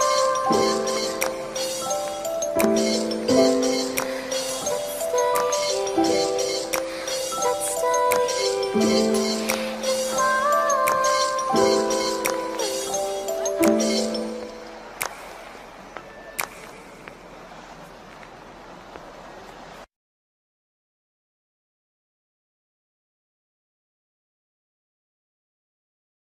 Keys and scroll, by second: 4.6 ctrl+z, 6.6 ctrl+t.